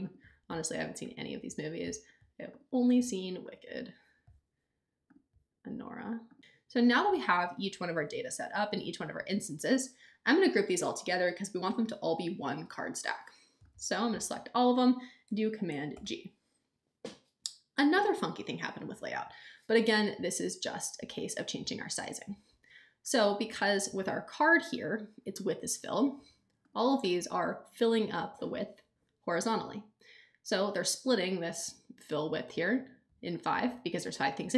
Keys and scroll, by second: 15.9 super+g.